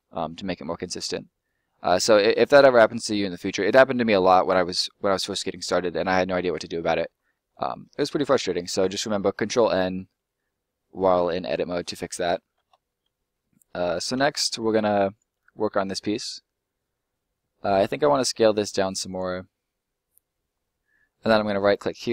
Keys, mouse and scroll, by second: 2.8 middle click, 4.7 s, 5.6 click, 5.9 middle click, 7.3-7.8 scroll down 1, 8.0 middle click, 9.4 scroll down 1, 9.5 middle click, 12.0-12.5 scroll down 1, 12.8 middle click, 13.2 scroll down 1, 13.4 middle click, 14.4 scroll down 1, 15.0 right click, 15.4 scroll up 1, 15.4 middle click, 18.2 s, 19.0 click, 19.2 middle click, 20.6-21.2 scroll up 1, 21.2 right click.